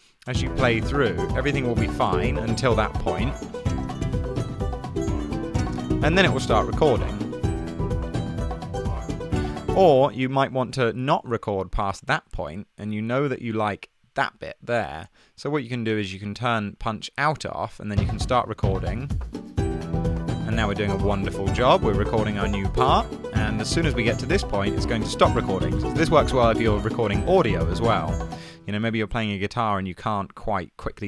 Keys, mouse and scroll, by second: 0.4 space, 9.4 super+z, 9.7 space, 10.2 space, 10.4 super+z, 28.7 super+z.